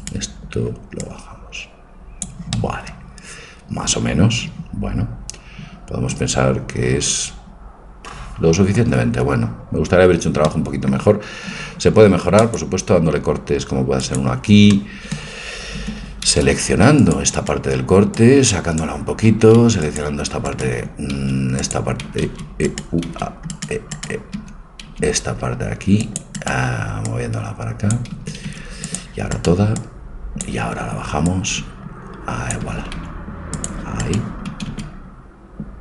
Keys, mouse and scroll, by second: 0.0 click, 0.0-1.8 right drag, 1.0-2.6 drag, 2.6-4.3 middle drag, 10.5-12.5 middle drag, 11.9 ctrl+r, 15.8 a, 16.5 c, 18.2-20.1 drag, 19.3 a, 20.7 a, 21.2 c, 23.1 c, 24.1-25.7 right drag, 24.3 a, 24.9 c, 25.7 middle click, 27.0-29.0 drag, 28.2 a, 28.5 c, 29.8-33.2 drag, 32.7 a, 33.0 c, 34.5 a, 34.7 c.